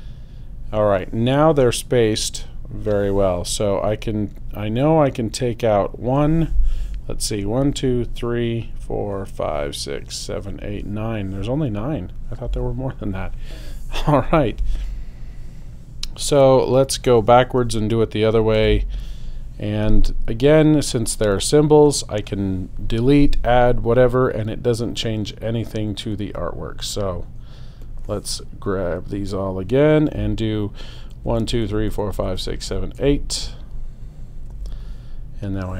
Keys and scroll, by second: 18.6 BackSpace, 31.1 alt+super+Left.